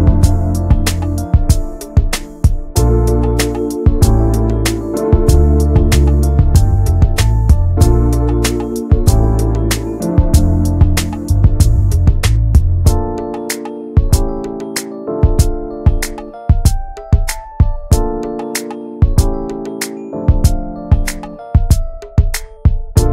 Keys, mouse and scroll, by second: 0.0 click, 0.7 alt+middle click, 1.4 click, 2.5 alt+middle click, 3.0 scroll up 4, 3.2 shift+middle click, 3.9 click, 5.4 alt+z, 5.9-8.4 drag, 8.6 scroll down 1, 8.8 middle click, 9.0 alt+z, 9.2 click, 9.4 Tab, 9.5 click, 9.7 ctrl+a, 10.0 scroll down 2, 10.2 middle click, 10.7 Tab, 11.0 middle click, 11.2 scroll up 1, 11.4 shift+middle click, 11.6 Tab, 11.9 Tab, 12.1 click, 12.3 scroll up 1, 12.6 middle click, 13.2 scroll up 1, 13.5 shift+middle click, 14.1 click, 16.5 `, 16.8 scroll down 2, 17.0-18.4 middle drag, 20.6 alt+middle click, 21.0 shift+middle click, 21.4 e.